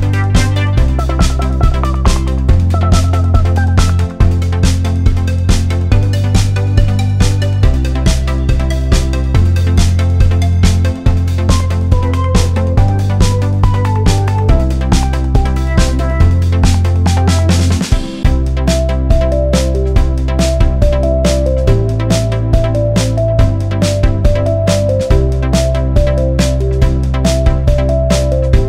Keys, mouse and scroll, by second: 0.2 click, 1.9 alt+scroll up 2, 2.1 click, 5.2 right click, 5.7 click, 6.0 alt+scroll up 1, 6.4 click, 6.6-6.9 alt+scroll up 1, 7.2 alt+click, 8.2 alt+click, 10.9 shift+Up, 11.3 shift+Down, 12.3 alt+scroll down 1, 13.2-13.6 alt+scroll up 1, 13.9 click, 16.7 click, 16.9 alt+scroll up 1, 17.0-17.3 alt+scroll down 1, 17.4 click, 18.3 alt+click, 19.6 click, 20.0-20.4 alt+scroll down 1, 20.7-21.2 alt+scroll up 1, 21.9 click, 22.2 alt+scroll down 1, 22.7 click, 23.7 click, 25.2 click, 25.6 alt+click, 26.8-27.4 alt+scroll up 2, 27.5 alt+click.